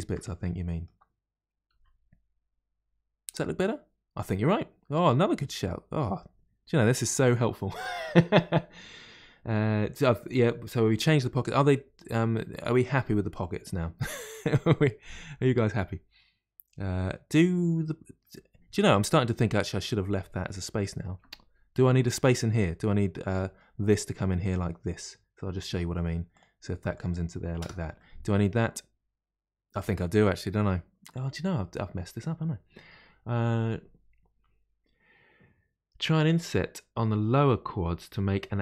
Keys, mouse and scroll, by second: 0.2-1.7 middle drag, 1.7 g, 3.6-5.2 middle drag, 5.2 g, 11.5-14.5 middle drag, 16.9-25.7 middle drag, 25.7 k, 27.9-31.0 middle drag.